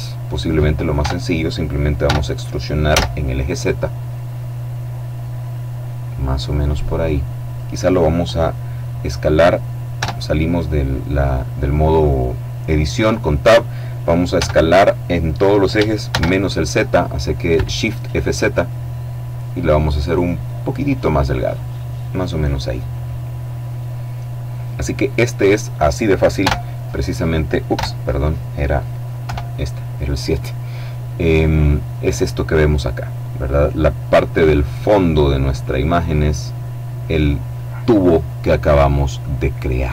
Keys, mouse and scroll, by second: 0.7 Tab, 1.8 e, 2.6 z, 5.1 click, 5.7-6.1 scroll down 1, 6.1 middle click, 9.6 Tab, 14.0 s, 15.8 shift+z, 20.6 click, 26.1 KP_0, 27.3 KP_0, 28.9 KP_7, 30.5 scroll up 2, 30.7-31.2 scroll down 2, 33.5-34.2 scroll up 2.